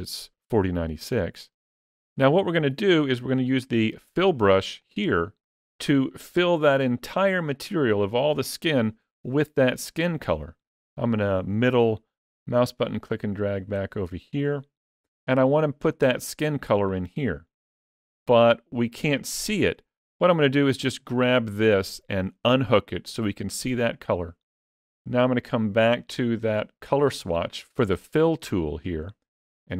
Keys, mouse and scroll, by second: 4.6 click, 11.3 middle click, 15.1 click, 20.9 click, 29.5 click.